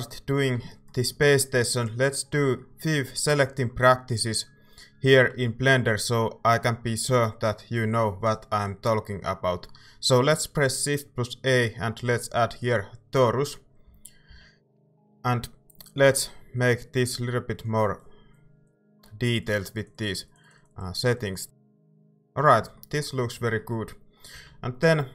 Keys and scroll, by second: 5.3 a, 13.8 z, 14.3 z, 24.3 a.